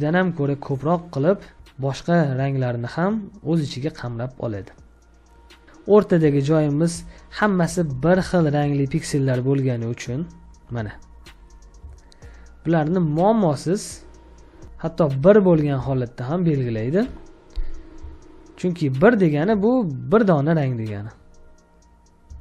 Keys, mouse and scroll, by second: 1.7 ctrl+click, 4.5 ctrl+click, 5.5-7.9 scroll up 1, 7.9 space, 8.2 ctrl+click, 11.8 ctrl+space, 11.9 ctrl+click, 12.0 ctrl+space, 12.9 ctrl+space, 15.7 ctrl+d, 17.0 typing, 17.9 ctrl+space, 18.1 ctrl+click, 18.2 ctrl+space, 19.6 ctrl+click, 19.7 ctrl+space, 22.2 ctrl+space.